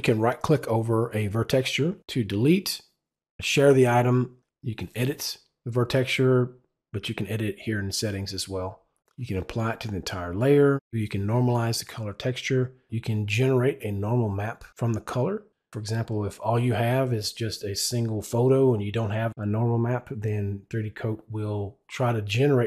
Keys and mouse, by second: 0.8 right click.